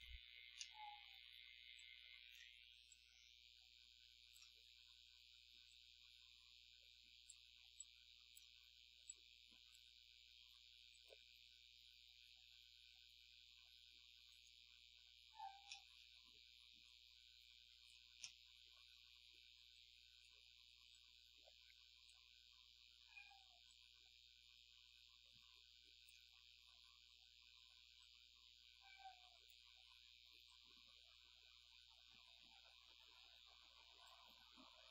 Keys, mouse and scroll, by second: 0.6 middle click, 1.0 scroll up 1, 1.8-2.5 drag, 2.9-4.6 drag, 5.7-7.5 drag, 7.8-8.6 drag, 9.1-9.9 drag, 10.9 click, 14.3 click, 15.7 middle click, 16.0 scroll down 1, 16.9-17.7 drag, 17.7-18.1 scroll up 1, 18.2-19.0 middle drag, 19.8-20.4 drag, 20.9-22.3 drag, 23.7-26.3 drag, 28.0-29.7 drag, 30.5-34.3 drag.